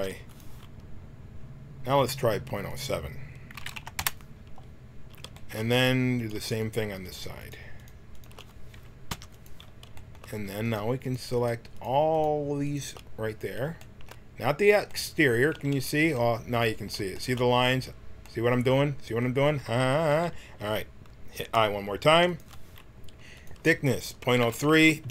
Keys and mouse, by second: 2.7-4.6 drag, 6.1-9.9 drag, 9.1 i, 10.6-14.9 drag, 15.1 middle click, 15.5 z, 15.7 z, 22.1 i, 23.3-25.1 drag.